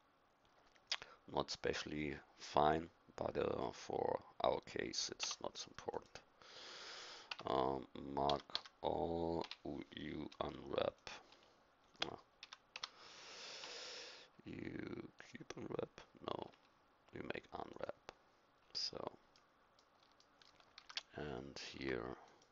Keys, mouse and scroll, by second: 5.2 Tab, 5.9-8.2 drag, 7.3 Tab, 8.2 a, 8.5 a, 9.4 u, 11.3 u, 12.4 a, 12.7 a, 13.6 u, 16.4 u, 19.4-20.8 middle drag, 20.8 a, 21.7 Tab.